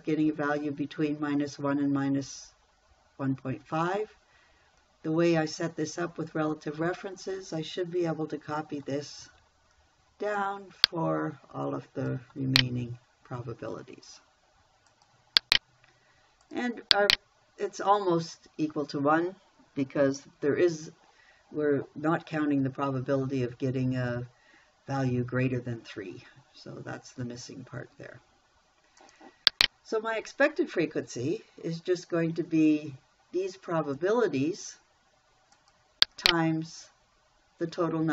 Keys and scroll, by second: 9.7 ctrl+c, 13.1 ctrl+v.